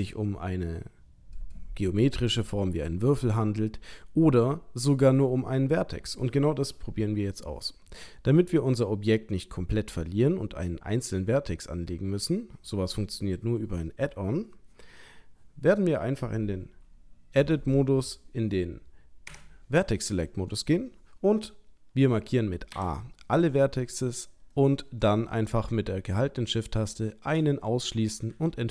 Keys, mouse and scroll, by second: 8.4 middle click, 22.7 a, 24.5 middle click, 26.5 shift+click, 28.3 Delete.